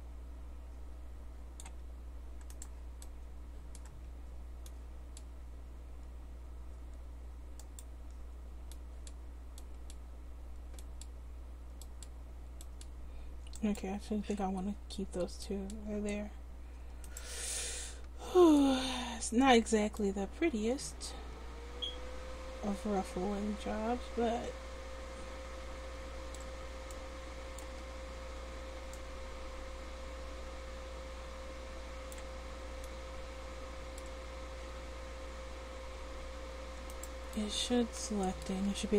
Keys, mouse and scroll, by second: 2.6-4.1 right drag, 3.1 click, 4.1 c, 17.2 right click, 17.5-19.0 drag, 19.0 c, 37.0-38.9 drag.